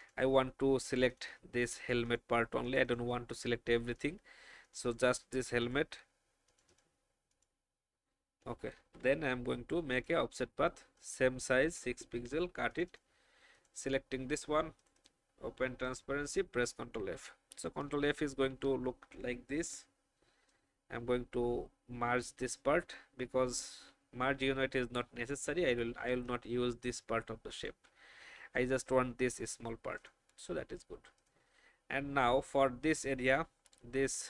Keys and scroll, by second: 8.7 ctrl+alt+f, 12.0 ctrl+x, 16.3 ctrl+f, 19.5 alt+shift+m, 24.3 v, 25.7 shift+e, 28.3 alt+shift+v.